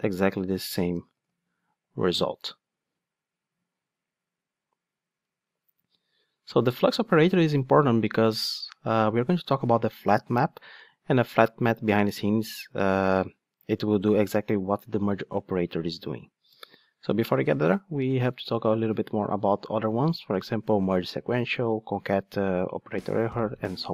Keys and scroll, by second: 1.1 ctrl+shift+d.